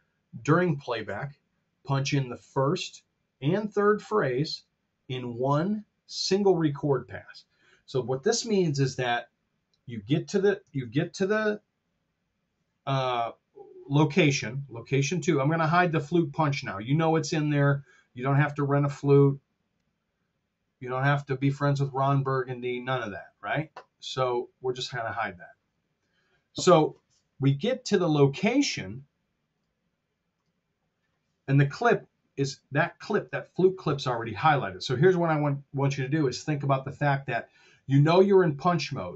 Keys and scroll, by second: 10.6 super+Tab.